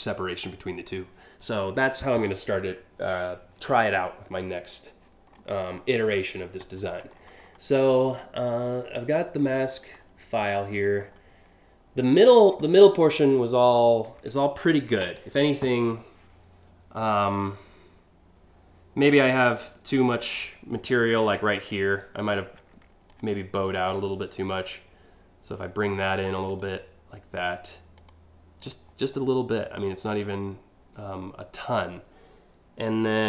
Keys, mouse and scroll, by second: 5.0 scroll down 2, 5.5 scroll down 2, 6.5 scroll up 1, 6.8 scroll, 7.1 scroll, 7.7 scroll, 9.0 scroll, 10.1-10.8 scroll up 3, 12.1 scroll down 1, 22.8 ctrl+click, 23.6 ctrl+click, 26.1 ctrl+click, 27.6 ctrl+click, 28.2 ctrl+click, 29.7-31.2 ctrl+drag.